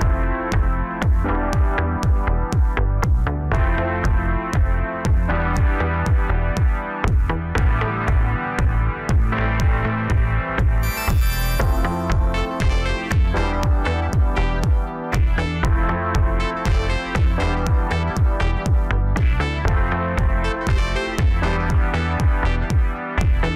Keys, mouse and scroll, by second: 0.7 click, 0.9 click, 1.3-2.0 scroll down 3, 2.0 KP_7, 2.7 scroll down 2, 3.8-5.8 drag, 5.8-6.3 scroll up 1, 6.6 scroll down 3, 6.9-9.4 middle drag, 9.4 scroll up 3, 10.0-11.2 middle drag, 11.2 2, 11.9 click, 12.1 click, 12.4 scroll down 4, 13.8-15.5 drag, 15.5 middle click, 16.0 Tab, 16.4-18.2 middle drag, 18.2 scroll down 2, 19.1 KP_7, 20.0 scroll up 1, 20.3-20.6 scroll down 3, 20.6-21.2 middle drag, 21.2 scroll up 1, 22.0 KP_1, 22.6-23.5 scroll down 3.